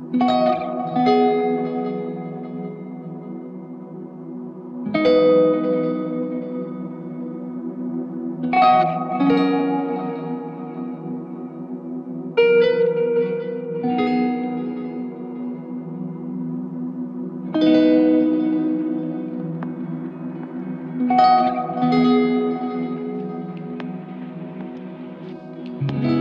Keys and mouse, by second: 3.2 ctrl+click, 14.9 w.